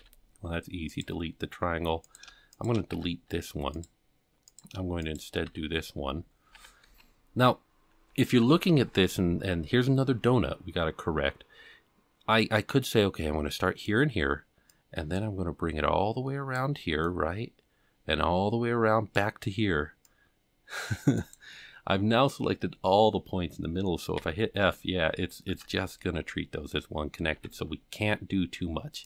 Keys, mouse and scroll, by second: 0.0 x, 2.1 click, 2.6 shift+click, 2.9 x, 4.5 click, 5.0 shift+click, 5.5 f, 5.9 scroll down 2, 6.6 alt+a, 6.9 c, 24.2 f, 25.5 ctrl+z, 27.4 alt+a, 28.0 c.